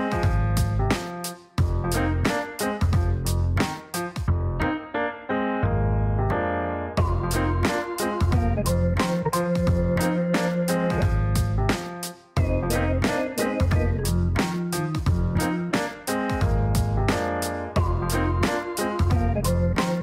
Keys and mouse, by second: 2.8 click, 3.4 space, 4.1 click, 5.4 click, 6.6 click, 8.9 click, 10.9 click, 12.1 click, 12.6 click, 13.4 click, 14.3 click, 16.8 click, 18.3 click.